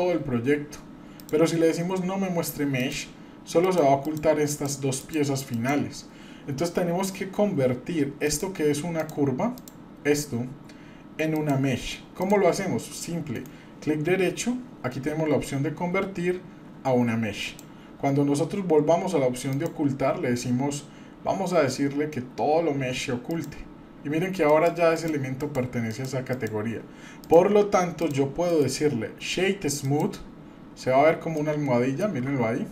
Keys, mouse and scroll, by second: 8.2 click, 9.0 drag, 9.5 click, 11.3 click, 12.2 click, 13.3-17.6 right drag, 19.5-27.0 drag, 27.2 click, 28.0 click, 28.5-30.0 right drag, 30.6 scroll up 1, 31.0-31.4 scroll down 1, 31.4 middle click, 32.2-32.7 scroll up 1.